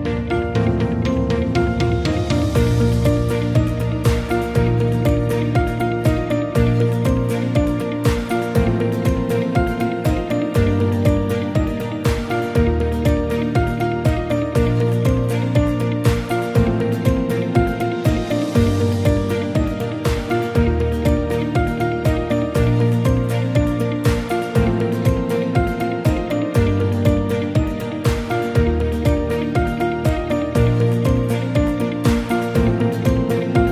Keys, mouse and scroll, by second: 24.8-25.4 ctrl+scroll up 2, 25.7-26.3 ctrl+scroll down 2, 27.0-27.4 ctrl+scroll up 2.